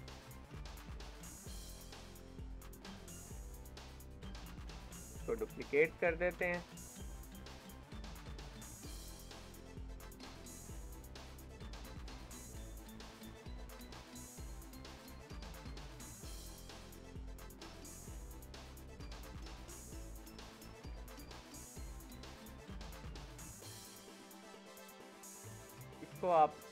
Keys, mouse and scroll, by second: 0.0-0.5 scroll up 2, 0.5 shift+middle click, 1.3 scroll down 3, 1.6 ctrl+s, 2.0-3.3 shift+middle drag, 3.3 click, 3.7-5.3 middle drag, 11.1-14.4 shift+middle drag, 14.4 click, 15.0 shift+d, 17.2-18.6 middle drag, 18.6-19.0 scroll up 3, 19.0 middle click, 19.6-19.9 scroll down 1, 19.9 shift+middle click, 20.7 ctrl+s, 21.2-24.7 shift+middle drag, 24.7 scroll up 4, 25.6-26.7 drag.